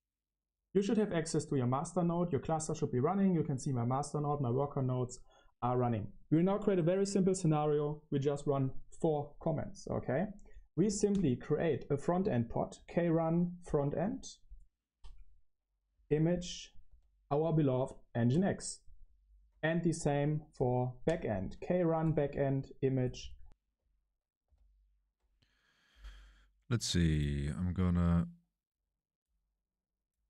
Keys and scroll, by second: 16.8 ctrl+alt+shift+3, 21.0 ctrl+alt+shift+h, 22.0 super+1, 22.3 ctrl+alt+shift+h, 22.3 super+1, 24.4 ctrl+alt+shift+3, 25.0 ctrl+alt+shift+3.